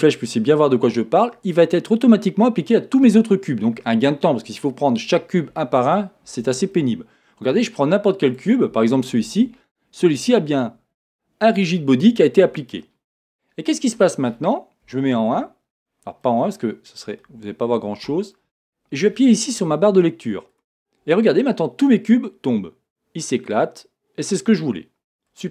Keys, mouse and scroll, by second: 0.0-6.7 drag, 6.7-8.3 middle drag, 7.5-8.3 scroll up 2, 8.3 click, 12.8-15.0 middle drag, 14.8 KP_1, 15.8-16.2 scroll down 1, 16.2-20.5 middle drag, 20.5-25.5 drag.